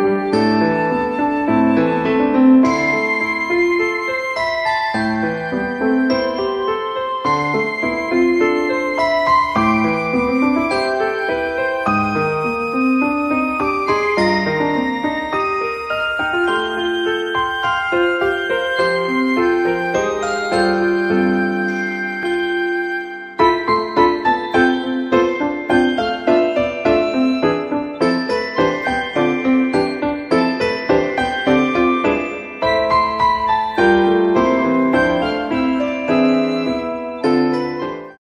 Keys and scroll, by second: 1.9 f, 5.2 g, 12.3 p, 19.4 f, 24.4 p.